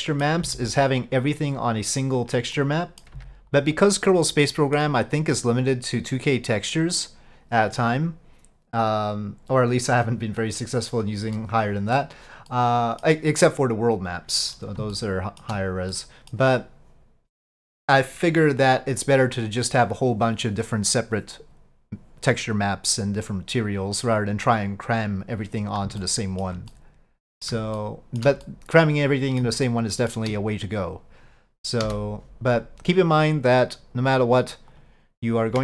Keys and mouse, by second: 0.5 c, 2.6 middle click, 3.2 c, 4.5 middle click, 11.4 middle click, 12.6 middle click, 15.0 shift+middle click, 16.0 middle click, 26.1 shift+middle click, 26.8 middle click, 27.8 shift+middle click, 28.5 middle click, 29.7 shift+middle click, 34.8 click.